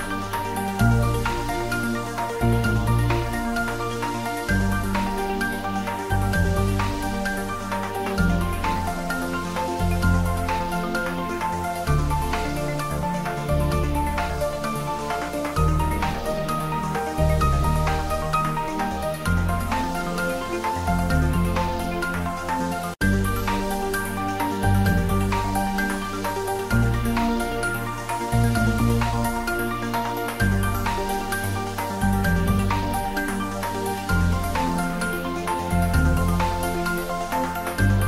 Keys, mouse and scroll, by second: 0.0-5.0 typing, 0.1 click, 1.7 click, 2.7 click, 3.9 click, 4.7 middle click, 5.2 middle click, 6.7 click, 7.6 shift+middle click, 8.1 ctrl+middle click, 8.6 click, 9.0-10.6 middle drag, 10.7 click, 12.9 g, 13.4 click, 13.8 middle click, 14.3 ctrl+middle click, 15.1 ctrl+middle click, 16.0-17.4 typing, 17.6 click, 19.5 3, 20.3 shift+middle click, 20.9 shift+middle click, 21.2 ctrl+middle click, 21.9 middle click, 22.7 click, 24.7 ctrl+middle click, 25.1 shift+middle click, 25.7 g, 26.4 click, 26.8 s, 27.2 click, 28.0-28.9 typing, 29.4 Return, 30.6 click, 31.3 g, 33.1 Right, 33.5 click, 34.8 ctrl+middle click, 35.2 shift+middle click, 36.1-38.0 typing, 37.2 click.